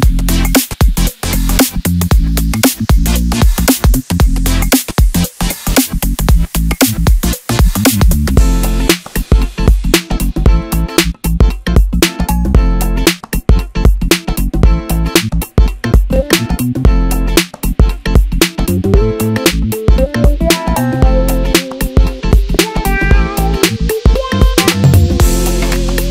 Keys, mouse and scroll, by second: 0.5 click, 1.7 Delete, 3.4 click, 4.7 middle click, 5.7-8.2 scroll up 1, 8.2 click, 9.2 click, 9.4 click, 9.9-12.3 middle drag, 12.3 e, 13.4 s, 15.4-16.8 scroll down 1, 16.8 e, 17.5 s, 19.5 e, 20.2 s, 23.0 e, 25.2 s.